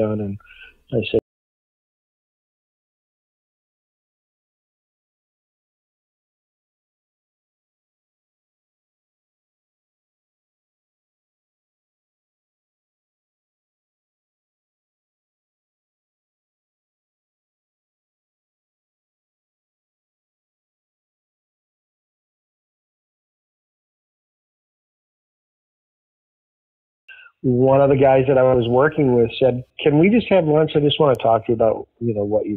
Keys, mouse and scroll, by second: 1.1 space, 26.9 click, 27.0 space, 28.0 click, 28.7 click, 29.8 click, 30.4-32.5 drag.